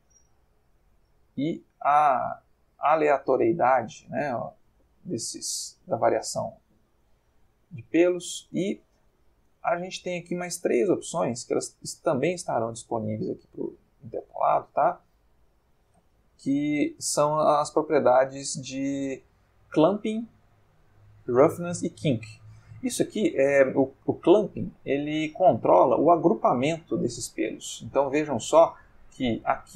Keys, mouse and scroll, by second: 0.5 Escape, 1.5-4.0 drag, 4.3-5.5 drag, 8.7 middle click, 11.7 click, 12.6 click, 15.5 click, 16.9 click, 18.2 click, 19.3 click, 20.0 middle click, 25.1-29.7 drag.